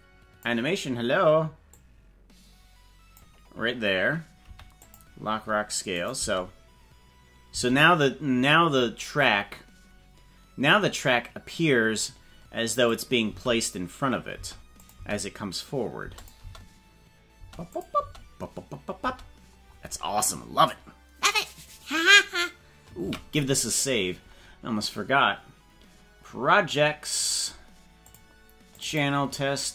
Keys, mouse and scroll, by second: 1.7-3.1 drag, 4.5 i, 5.9 click, 6.1 space, 7.5 space, 12.9 click, 13.3 space, 14.5 space, 14.9 click, 15.1 space, 16.1 space, 16.2 click, 16.4 space, 17.5 space, 17.7 click, 18.0 space, 19.1 space, 23.1 ctrl+s.